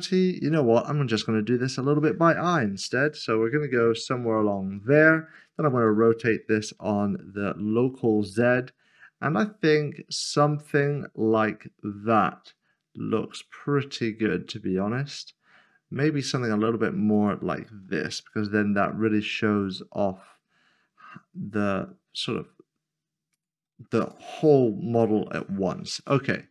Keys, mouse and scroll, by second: 2.3-2.7 typing, 5.8-6.8 typing, 17.1 click, 18.1-18.8 typing, 23.4 click.